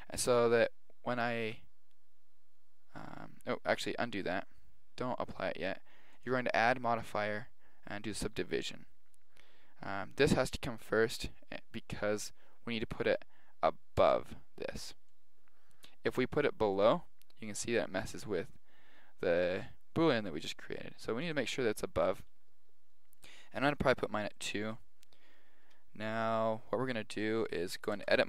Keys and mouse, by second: 0.9 middle click, 4.0 ctrl+z, 6.1 click, 14.0 click, 15.1-16.7 middle drag, 16.7 click, 21.2 click, 23.6 click, 24.4-25.4 middle drag, 25.4 click, 27.0-28.2 middle drag, 27.9 Tab.